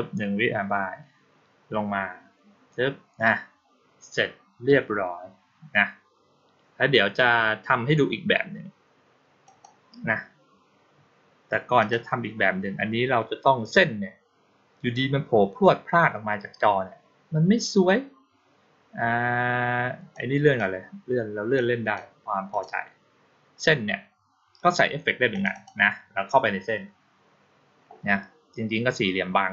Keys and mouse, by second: 9.3 click, 11.7 click, 20.0-20.4 drag, 21.4-21.8 drag, 22.4 click, 25.2 click, 25.4 click.